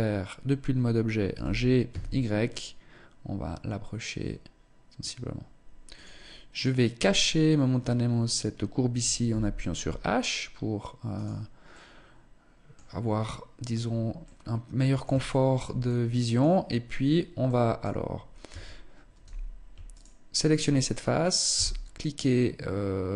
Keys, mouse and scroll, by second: 0.8 g, 6.2 right click, 6.7 right click, 8.8 h, 10.7 right click, 11.2 middle click, 13.3-13.8 scroll up 2, 13.8 middle click, 14.8 shift+middle click, 15.4 middle click, 17.0 middle click, 17.1 shift+middle click, 18.0 Tab, 19.4 alt+right click, 21.0 x.